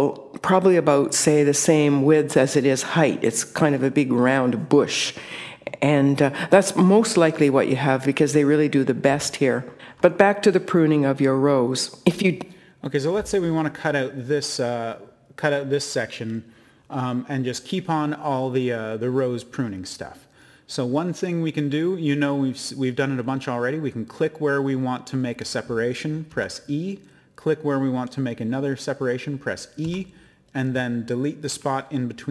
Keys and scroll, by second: 26.3 e, 29.8 e.